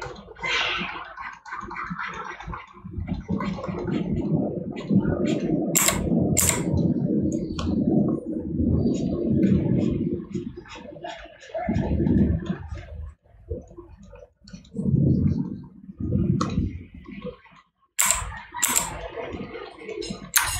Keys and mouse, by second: 7.6 right click.